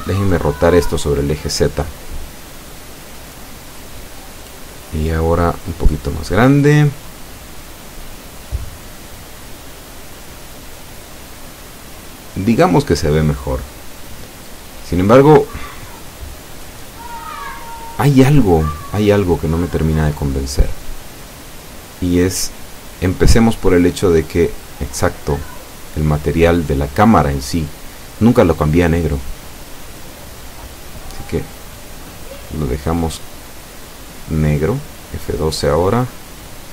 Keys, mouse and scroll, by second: 2.6 Escape, 3.5-4.8 middle drag, 6.5-7.7 drag, 8.6 r, 9.0 z, 11.0 click, 11.7-12.8 middle drag, 13.1 s, 14.3 click, 16.5 F12, 28.3 Escape, 29.6 right click, 30.1 middle click, 31.4 scroll up 1, 32.2 click, 35.5-35.9 scroll up 1.